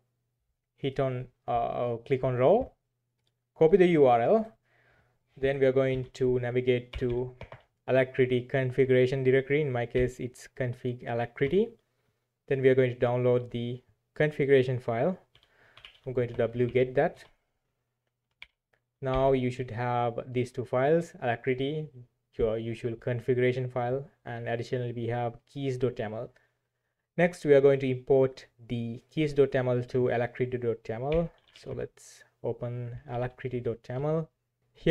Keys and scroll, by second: 5.9 alt+1, 6.6-7.5 typing, 9.9 ctrl+e, 11.4 Return, 15.0-16.4 typing, 16.6 ctrl+v, 17.1 Return, 18.4 ctrl+l, 19.1 typing, 19.5 Return, 31.1-33.8 typing, 33.9 Return.